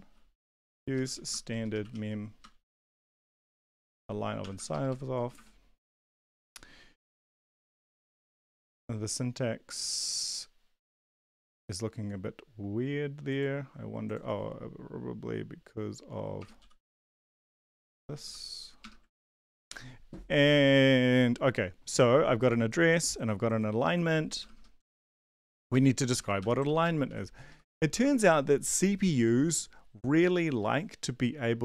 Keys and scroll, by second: 0.0-2.6 typing, 2.8 ctrl+v, 3.4 ctrl+Left, 3.6 ctrl+Left, 3.8 ctrl+Left, 4.4 BackSpace, 4.5 BackSpace, 4.7 BackSpace, 4.9 Delete, 6.4 ctrl+d, 16.4 BackSpace, 16.6 ;, 16.9 Down, 17.1 Down, 17.3 End, 17.5 Up, 17.7 End, 18.0 BackSpace, 18.2 ;, 19.1 ctrl+s, 24.4 BackSpace, 24.5 BackSpace, 24.8 Down, 24.9 Down, 25.4 Down, 25.7 ctrl+Right, 25.9 ctrl+Left, 26.1 ctrl+Left, 26.4 Home, 26.6 ctrl+Right, 26.8 ctrl+Right, 27.0 ctrl+Right, 27.5 Left, 27.6 Left, 27.9 space.